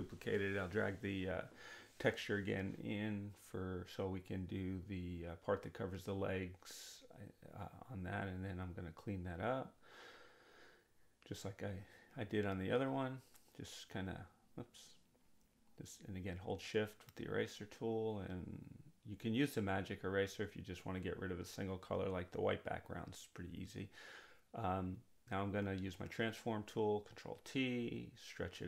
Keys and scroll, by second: 15.2 ctrl+z, 24.5 ctrl+t.